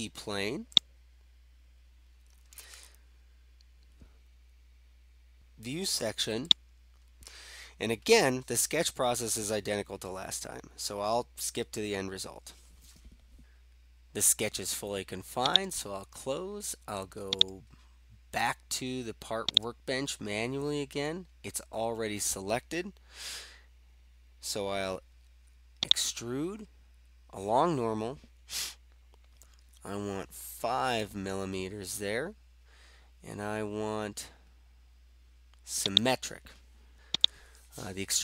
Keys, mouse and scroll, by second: 0.8 click, 6.5-7.5 drag, 15.6-16.7 drag, 17.6-18.7 drag, 19.7-20.7 drag, 25.9-27.2 drag, 31.0 5, 36.0 click, 37.3 click.